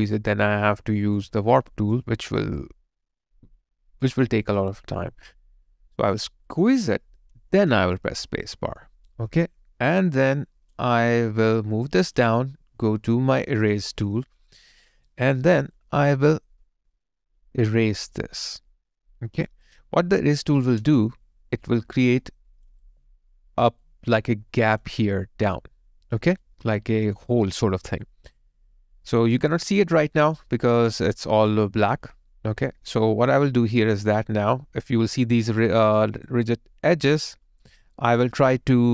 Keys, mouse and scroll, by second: 6.5 alt+click, 7.5 space, 8.4 alt+right click, 11.0 alt+click, 14.8 alt+right click, 19.7 alt+click, 20.8 space, 27.7 alt+right click, 28.0 alt+click, 35.1 alt+click, 35.9 alt+right click.